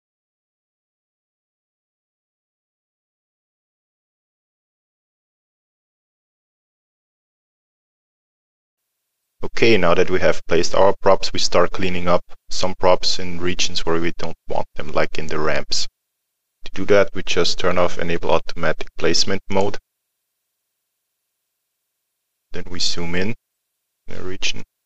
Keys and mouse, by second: 0.4 click, 0.5 alt+middle click, 0.8 click, 1.1 middle click, 1.4 click, 7.8 alt+middle click, 8.1 middle click, 8.4 alt+middle click, 8.8 middle click, 19.5 click, 21.3 middle click.